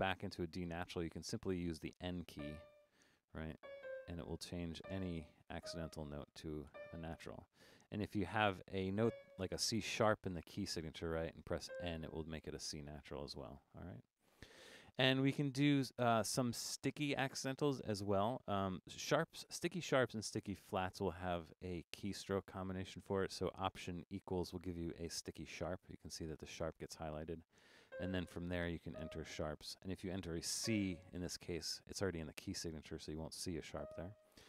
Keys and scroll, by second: 2.4-5.6 typing, 6.7 typing, 11.7 n, 24.3 alt+=.